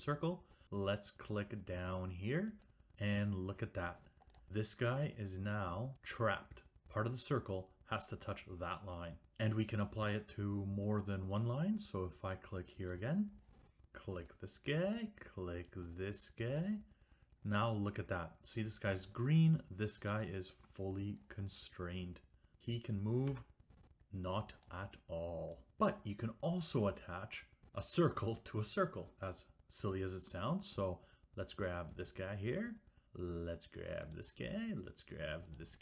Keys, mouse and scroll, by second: 0.3 click, 2.8 click, 4.5 middle click, 13.0 click, 14.4 click, 16.7 click, 23.4 Escape, 24.8 click, 32.1 click, 34.3 click, 35.7 click.